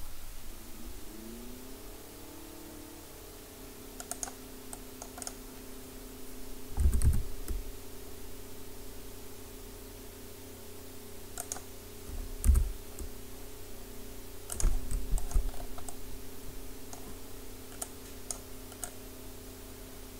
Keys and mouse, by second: 5.2-6.5 drag, 5.2-6.8 right drag, 6.8 e, 11.6-17.0 drag, 12.5 e, 17.0 middle click, 17.9-20.1 drag.